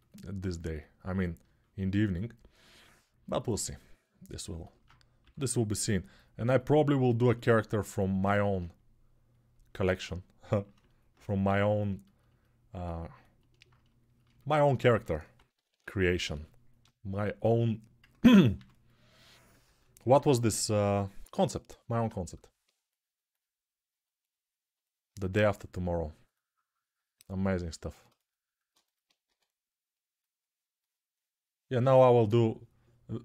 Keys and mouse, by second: 1.4-3.6 ctrl+alt+right drag, 3.6-7.3 drag, 5.0 6, 7.3-11.4 alt+right drag, 11.4-13.8 alt+shift+drag, 14.7 2, 15.6 [, 17.9 ctrl+z, 18.0-33.2 drag, 18.3 2, 19.4 ctrl+z, 19.8 3, 29.0 1.